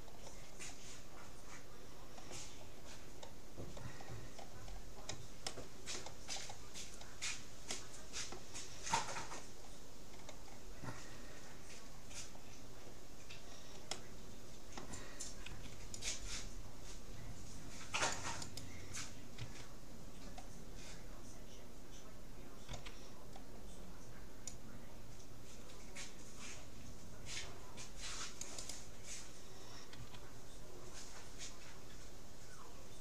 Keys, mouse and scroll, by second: 4.1-5.3 middle drag, 5.5-8.3 middle drag, 11.1 middle click, 12.5-13.9 middle drag, 14.7-16.3 middle drag, 15.5 c, 19.5 a, 22.7 c, 30.1 s.